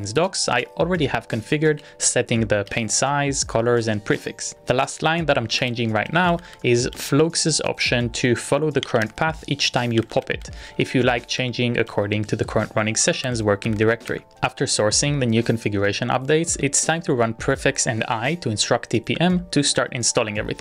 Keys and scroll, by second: 16.6 shift+|, 20.5 Return.